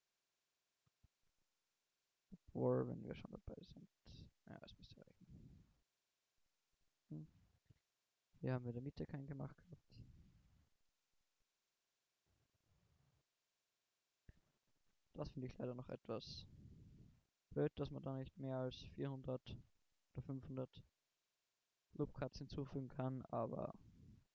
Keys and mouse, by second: 7.2 ctrl+z, 8.4 ctrl+r, 9.2-11.2 drag, 10.0 ctrl+r, 13.1 click, 14.1 ctrl+r, 18.1 middle click, 19.5 Tab, 20.3 KP_1.